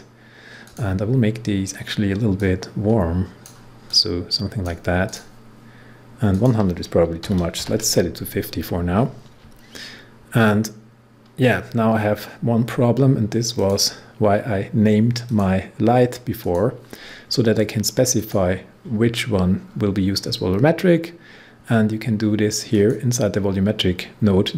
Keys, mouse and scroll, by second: 7.2-7.5 typing, 13.5 click, 19.1 scroll down 1, 22.7 click.